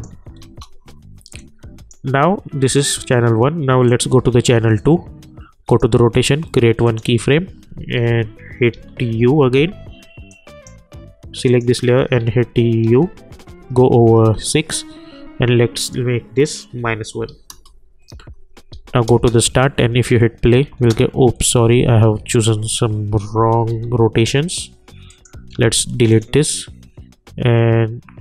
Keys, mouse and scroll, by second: 10.5 click, 12.2-14.0 typing, 15.8 click, 16.8 -, 17.5 Return, 18.2 j, 18.7 j, 19.0 space, 22.2 ctrl+z, 23.7 j, 24.2 j, 25.1 click.